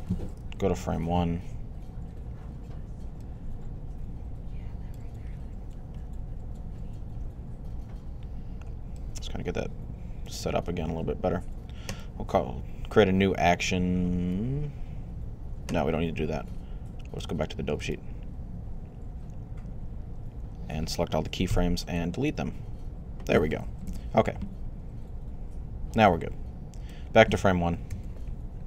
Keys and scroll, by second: 0.4 Left, 21.3 x, 23.7 Right, 27.7 typing.